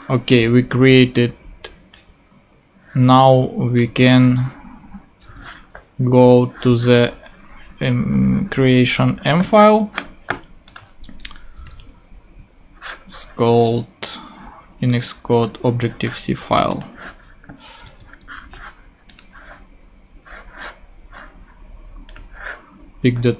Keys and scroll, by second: 4.9 super+c, 5.3 super+Tab, 9.3 super+Tab, 11.6 super+n.